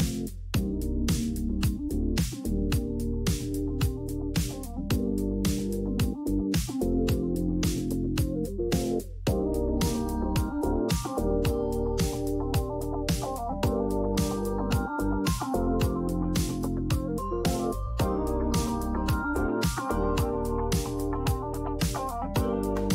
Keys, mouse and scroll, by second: 4.5 click, 7.2 click, 10.2 click, 12.7 click, 14.5 click, 15.9 click.